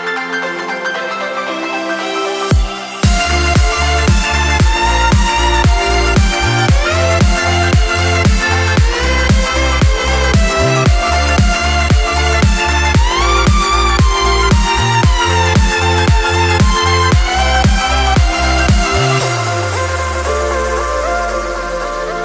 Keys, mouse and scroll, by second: 2.5 ctrl+t, 3.9 shift+t, 6.0-8.8 drag, 9.3 Return, 17.3 click, 18.8 click, 19.6 right click, 21.8 click.